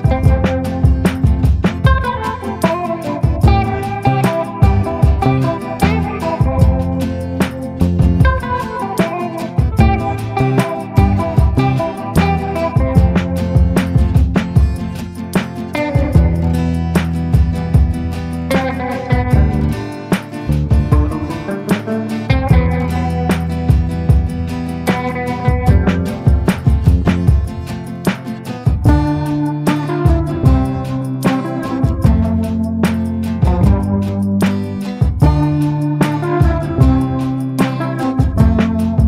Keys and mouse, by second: 6.9 KP_7, 7.7 shift+middle click, 8.5 KP_7, 9.7 shift+middle click, 10.4 shift+middle click, 13.0 click, 13.9-14.5 [, 14.7 [, 14.7 click, 15.3 ctrl+z, 15.8 click, 17.2 click, 18.9 click, 19.9 click, 20.7 ctrl+z, 21.1 click, 22.7 click, 23.4 click, 24.0 ctrl+z, 24.2 ctrl+z, 26.6 click, 27.0 click, 27.3 click, 27.7 ctrl+z, 27.8 ctrl+z, 28.1 ctrl+z, 28.4 click, 28.9 click, 29.2 click, 30.1 ctrl+z, 30.6 click, 31.3 ctrl+z, 31.5 ctrl+z, 31.8 click, 33.2 click, 35.1 middle click, 35.9 middle click, 36.2 middle click, 38.5 middle click.